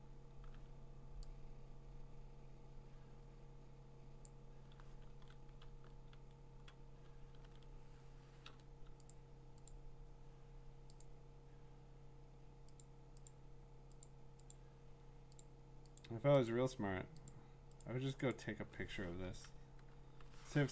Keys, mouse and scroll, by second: 4.2 click, 5.1 ctrl+d, 5.6 ctrl+z, 6.1 ctrl+z, 7.4 ctrl+d, 8.4 l, 9.1 click, 9.7 click, 11.0 click, 12.8 click, 13.3 click, 14.1 click, 14.5 click, 15.4 click, 16.0 click, 16.5 click, 17.3 click, 17.8 click, 18.3 click.